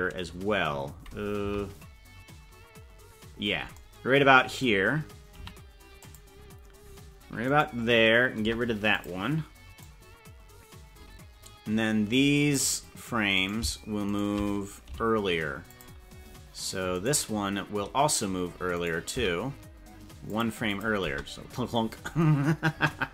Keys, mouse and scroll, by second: 1.6 Left, 5.4 i, 7.6 right click, 8.5 Delete, 9.8-12.6 drag, 13.5 right click, 14.1 shift+right click, 14.9 g, 17.1 right click, 18.9 right click, 19.1 g, 20.7 click, 21.1 space, 22.7 KP_0.